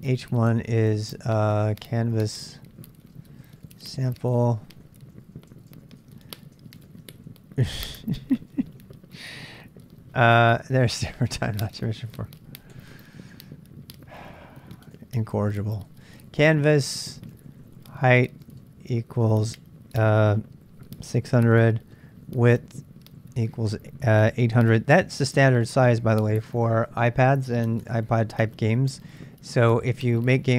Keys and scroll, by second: 0.0-0.3 typing, 1.5-7.2 typing, 6.6 ctrl+[, 7.0 Return, 8.2 ctrl+[, 8.3-10.2 typing, 11.3 ctrl+[, 11.4-12.7 typing, 14.7-19.7 typing, 21.1-23.4 typing, 24.6-24.9 typing.